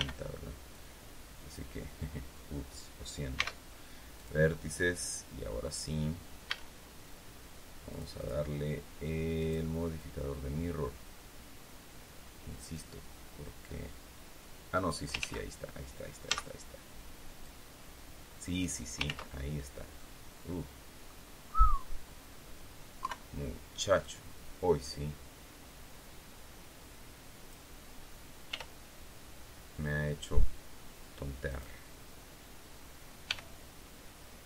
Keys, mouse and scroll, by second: 0.7 click, 3.3 x, 4.1 click, 6.4 a, 7.8 click, 9.3 click, 12.6-15.0 drag, 15.1 ctrl+z, 16.2 z, 17.3-18.7 drag, 19.0 ctrl+z, 19.9-21.2 drag, 22.9 KP_3, 23.9-27.6 drag, 28.4 r, 31.4 click, 33.2 g.